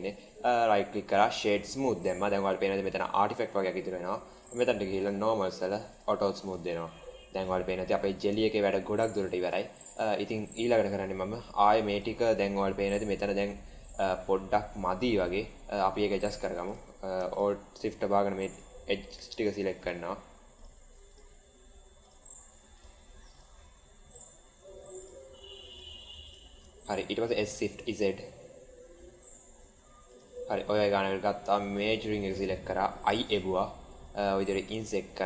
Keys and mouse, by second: 2.6 middle click, 4.9 click, 5.9 click, 6.7-7.9 middle drag, 8.3 shift+middle drag, 8.9 middle click, 9.8 middle click, 10.1 Tab, 11.9 Tab, 12.9-13.5 middle drag, 14.3-15.3 middle drag, 15.4 Tab, 16.0 middle click, 17.2 alt+shift+click, 19.7 alt+shift+click, 21.0 alt+shift+drag, 22.0 alt+shift+drag, 22.7 alt+shift+click, 23.2 alt+shift+drag, 25.6 alt+shift+drag, 27.2 s, 33.0 i.